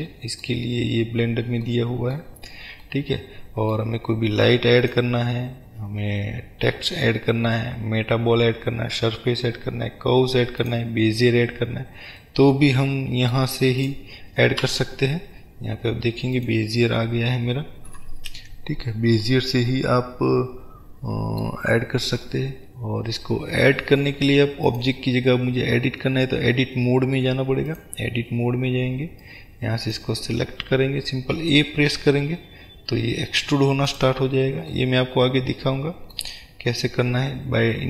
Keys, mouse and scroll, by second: 1.3 scroll down 1, 2.5-2.9 scroll down 1, 4.9-12.4 drag, 12.4-15.4 middle drag, 14.0 click, 14.7 Delete, 15.4-16.4 scroll up 1, 16.4 click, 18.1 KP_Decimal, 19.4-24.7 middle drag, 24.7-29.4 drag, 31.3 e, 34.1 click, 34.3 scroll down 1, 34.9-37.8 middle drag, 37.5 scroll up 1.